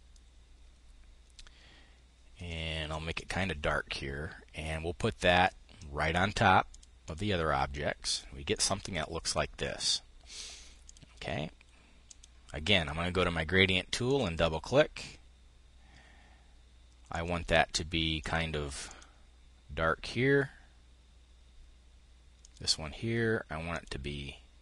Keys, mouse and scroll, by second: 5.5 click, 6.3 click, 7.7 click, 8.8 click, 10.5-11.7 drag, 13.7-15.1 drag, 16.7-17.9 drag, 18.4 click, 22.0-23.2 drag, 23.3 click.